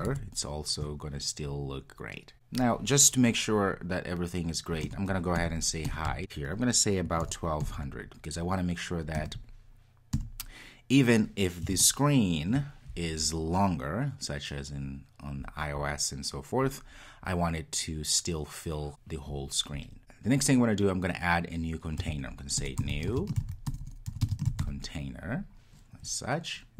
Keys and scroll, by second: 6.2 Return.